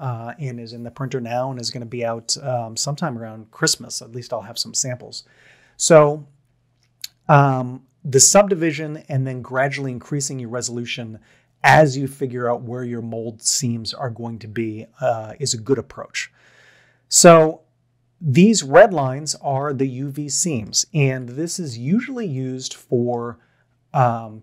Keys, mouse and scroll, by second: 17.2-18.4 middle drag, 21.0 a.